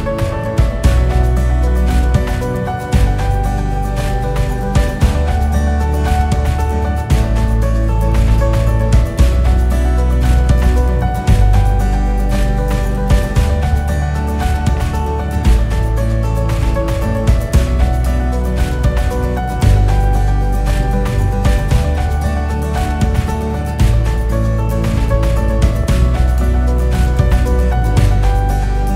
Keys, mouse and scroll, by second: 4.3 click, 6.1-7.5 drag, 8.1 click, 11.1 click, 12.2 click, 12.8-14.3 drag, 17.8-18.4 drag, 18.5-19.1 scroll down 4, 19.1-20.7 scroll up 5, 21.6 click, 23.2-23.7 drag, 24.1-24.8 scroll down 7, 24.8-25.6 scroll up 2, 25.6 click, 27.2 KP_6, 27.4 KP_6, 27.5 KP_6, 27.7 KP_6.